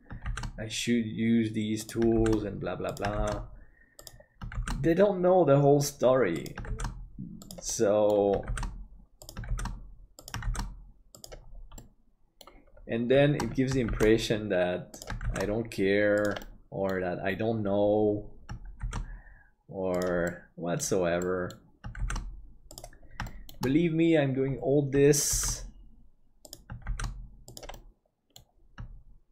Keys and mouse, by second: 7.7 middle click, 11.7 middle click, 13.8 shift+d, 16.4 middle click, 18.8 shift+d, 20.3 middle click, 21.2 middle click, 22.0 shift+d, 23.3 shift+middle click, 25.3 shift+d, 27.8 middle click.